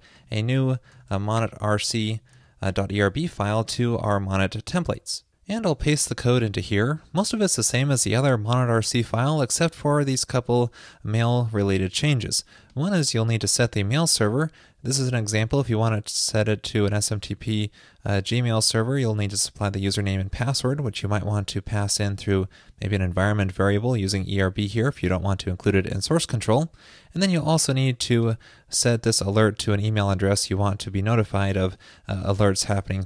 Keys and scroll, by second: 1.0 super+a, 6.0 super+v.